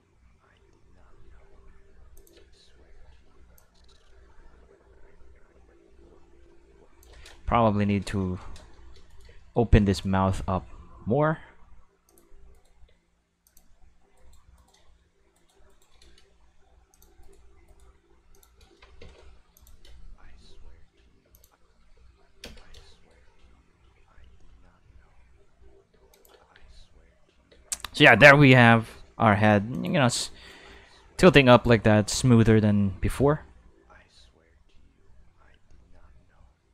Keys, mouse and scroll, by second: 2.0 space, 2.2 click, 2.3 space, 3.5 space, 3.6-7.0 drag, 7.9 q, 8.3 shift+middle click, 9.1 right click, 9.9 shift+right click, 10.3 g, 11.4 middle click, 12.1 click, 12.5 right click, 12.8 g, 13.4 click, 14.2 right click, 14.6 shift+right click, 14.8 g, 15.3 right click, 15.7 shift+right click, 16.2 g, 16.9 click, 17.2 right click, 17.7 right click, 17.8 g, 18.3 click, 19.0 Tab, 19.6 click, 19.8 space, 21.2 space, 21.3 click, 21.8 q, 22.4 space, 22.8 shift+middle click, 25.9 space, 26.1 click, 26.3 space, 27.5 space, 28.0 click, 28.2 space, 28.9 space, 29.3 middle click, 29.7 click, 30.0 space, 31.3 space, 31.5 click, 33.2 space.